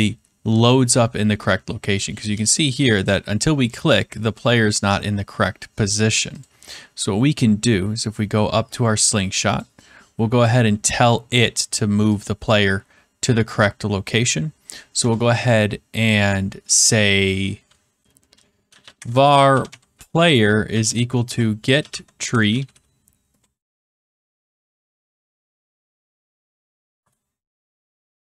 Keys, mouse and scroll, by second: 3.8 click, 6.3 click, 7.5 scroll, 8.9 scroll, 9.5 click, 9.9-10.3 scroll, 10.6 middle click, 12.2 click, 14.9 Return, 18.4-23.7 typing, 26.9 Down, 26.9 Return, 27.9-28.3 typing.